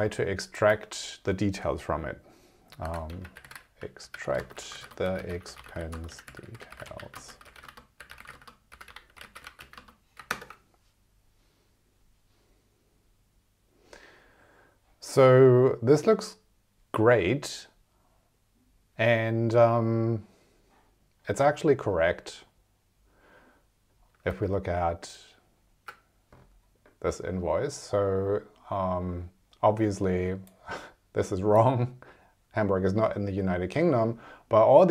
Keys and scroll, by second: 4.3 space, 4.7 e, 4.8 space, 5.9 space, 7.0 s, 7.1 space, 9.4 e, 9.7 space, 10.3 super+Return, 24.2 super+Tab.